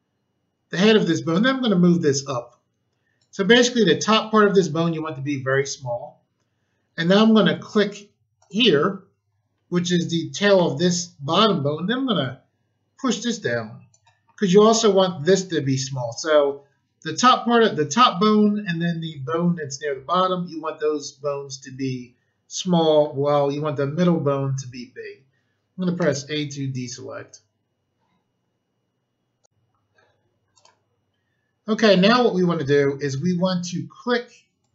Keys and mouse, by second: 1.3 click, 8.3 click, 12.1 click, 25.9 a, 29.4 click, 30.4 click, 30.5 click, 31.8 click, 34.6 click.